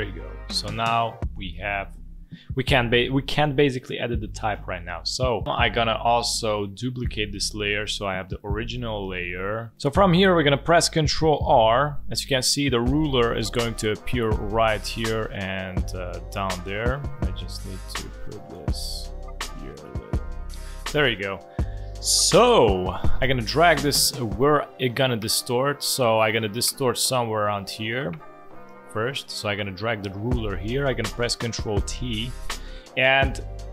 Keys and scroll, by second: 11.3 ctrl+r, 31.8 ctrl+t.